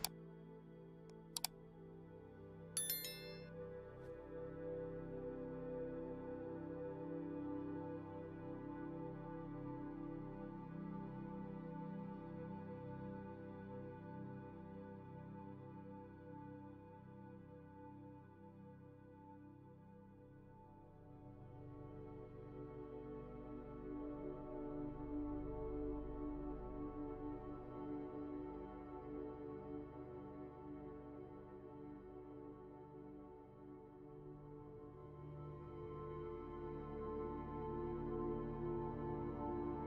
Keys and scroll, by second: 0.5 p, 3.6 ctrl+z, 6.3 c, 11.7 v, 12.4 Delete, 14.6-18.2 typing, 19.4 v, 22.6 v, 27.5 v, 31.4 p, 32.2 c, 33.3 ctrl+z, 33.6 p, 35.1 c, 37.4 v.